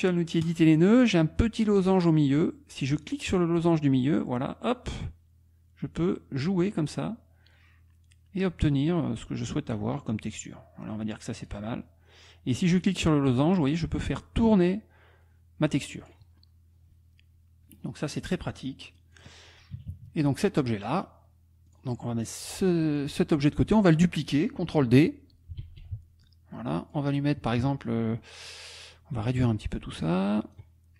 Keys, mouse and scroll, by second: 0.4 click, 3.2-11.6 drag, 12.8-16.3 drag, 18.8 click, 19.7 KP_Subtract, 20.7 click, 22.3 click, 25.6 ctrl+d, 26.2 ctrl+click, 27.6 KP_Subtract, 28.2 click, 29.3-30.7 ctrl+drag.